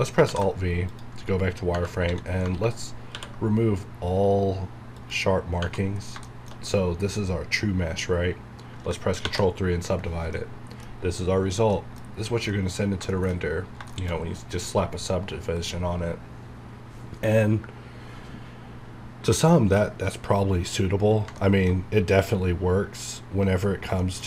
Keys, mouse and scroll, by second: 0.3 alt+v, 0.9 click, 1.4 scroll up 1, 1.7 Tab, 3.1 ctrl+e, 5.6 Tab, 5.9 scroll down 1, 6.3 shift+middle click, 9.2 shift+middle click, 10.3 middle click, 10.4 middle click, 10.9 scroll up 1, 11.7 middle click, 12.5 shift+middle click, 12.7 shift+scroll down 1, 13.1 shift+middle click, 13.4 scroll up 1, 13.9 middle click, 14.2 scroll up 1, 14.8 scroll down 1, 19.1 scroll down 1, 19.8-21.4 middle drag, 23.1 scroll down 1, 24.0 shift+middle click, 24.2 shift+scroll down 1.